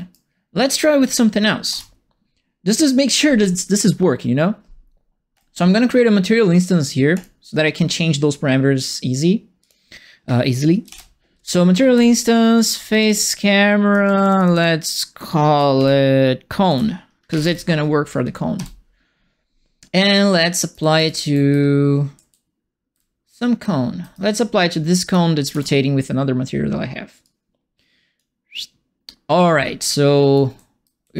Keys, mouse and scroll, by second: 1.6 ctrl+space, 5.3 right click, 7.1 click, 9.6 click, 11.9 End, 12.5-14.5 typing, 15.7-17.9 typing, 18.5 Return, 20.5-23.6 typing, 20.7-24.1 right drag, 25.0 click, 25.5 ctrl+space, 27.2 click, 30.3-31.1 right drag, 30.5 a, 31.0 a.